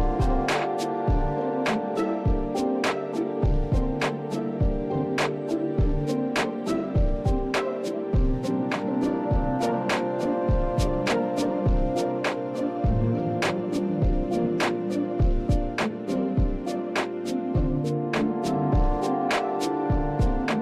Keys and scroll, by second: 11.4 Return, 18.2 typing.